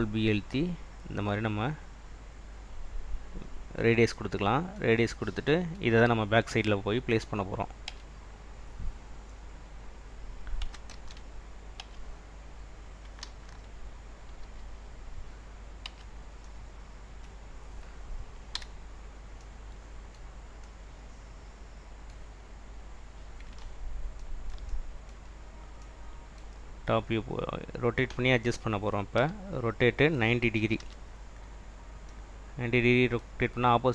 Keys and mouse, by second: 3.1 click, 8.0 Tab, 9.2-9.9 drag, 11.0 ctrl+z, 11.9 Tab, 13.4 ctrl+3, 14.5 Escape, 15.9 Tab, 18.6 /, 22.7 drag, 24.7 middle click, 29.2 r, 30.6 9, 30.9 0.